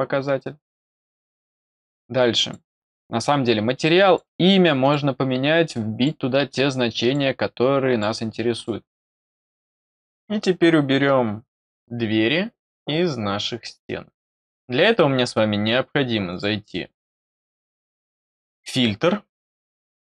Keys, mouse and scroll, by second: 2.3 click, 3.1 click, 4.7 click, 5.5 click, 6.9 click, 7.5 click, 8.5 click, 16.2 click, 19.7 click.